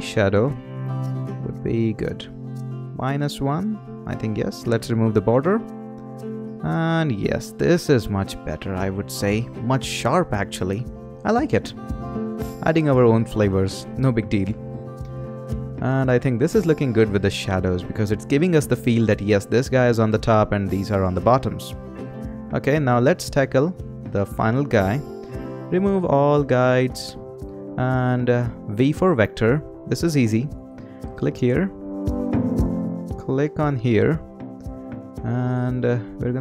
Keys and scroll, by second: 28.7 v.